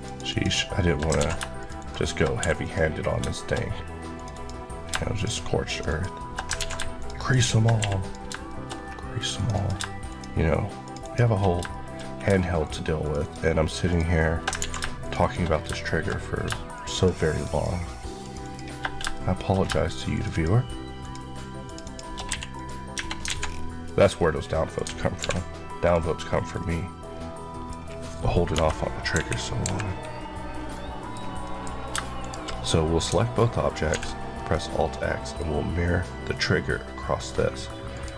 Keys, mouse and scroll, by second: 0.2 shift+Left, 1.1 ctrl+z, 1.4 shift+click, 1.7 shift+Left, 2.3 Left, 2.3 q, 2.5 click, 3.0 scroll, 3.0 scroll down 1, 3.2 shift+middle click, 3.4 scroll up 1, 4.0 click, 4.2 click, 5.0 shift+click, 5.6 click, 6.5 ctrl+z, 6.9 click, 7.7 q, 7.9 click, 8.3 shift+middle click, 8.6-9.2 scroll up 1, 9.2 click, 9.4 Left, 10.0 shift+click, 10.9 shift+Left, 11.5 shift+Left, 11.6 shift+middle click, 12.0 scroll up 2, 12.5 shift+click, 14.5 ctrl+z, 14.9 shift+click, 15.4 scroll down 2, 15.7 shift+middle click, 16.0-16.6 scroll up 2, 16.6 shift+click, 16.8 shift+Left, 18.1 shift+click, 18.3 shift+Left, 18.8 Left, 19.0 shift+middle click, 20.0 shift+click, 20.2 shift+Left, 20.9 Left, 21.7 shift+click, 22.2 q, 22.4 click, 23.1 Tab, 23.1 alt+z, 23.3-23.7 alt+scroll down 2, 23.7 middle click, 24.0 scroll down 1, 24.4 middle click, 25.1 alt+v, 25.7 click, 26.2-26.5 scroll down 1, 26.5 middle click, 27.7-28.2 scroll down 1, 28.4 KP_Divide, 29.0 KP_1, 29.5 KP_3, 30.6 middle click, 31.3 middle click, 31.6-32.1 scroll down 2, 32.1 shift+click, 33.8 alt+x, 34.4-34.9 scroll down 1, 34.9 middle click, 37.8 click.